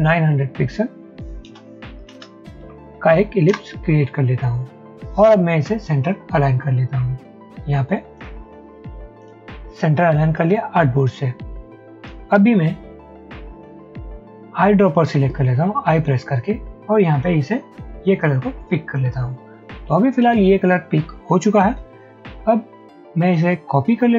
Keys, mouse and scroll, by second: 0.0-0.3 typing, 1.5-2.3 typing, 2.7 Tab, 3.4 typing, 3.6 Return, 15.2 i.